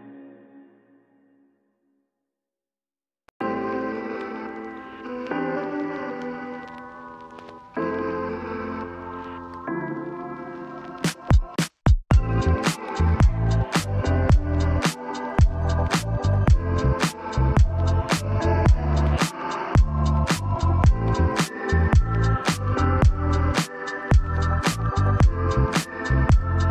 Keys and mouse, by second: 1.7 Tab, 2.3 a, 3.0 shift+middle click, 4.7-5.9 drag, 8.1 shift+d, 10.1 g, 11.1 x, 12.7 shift+middle click, 13.8 click, 14.2 shift+middle click, 15.4 g, 15.7 z, 16.7 click, 17.9 f, 19.9 shift+middle click, 21.4 l, 22.1 click, 23.5 shift+middle click, 25.0 click, 25.3 shift+middle click, 26.2 e.